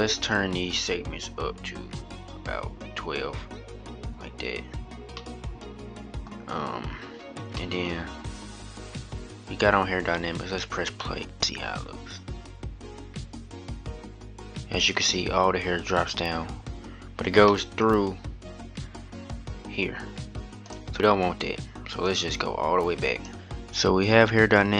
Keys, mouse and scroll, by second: 0.0-4.1 drag, 4.9-6.5 middle drag, 6.5-7.3 scroll up 2, 7.3-11.0 middle drag, 11.0-14.3 drag, 17.5-20.6 middle drag, 20.8-23.3 drag.